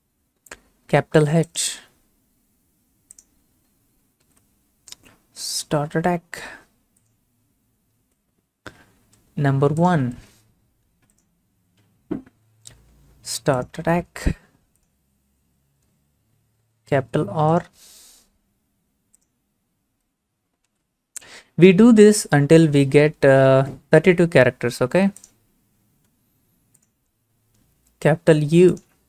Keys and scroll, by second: 4.2 h, 12.5 1, 20.7 r.